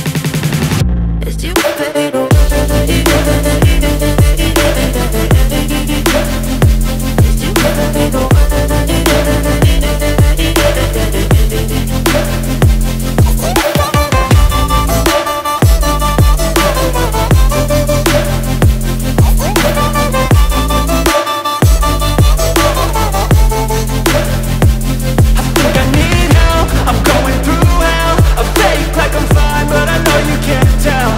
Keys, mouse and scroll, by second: 10.2 ctrl+click, 11.3 ctrl+click, 12.8 ctrl+click.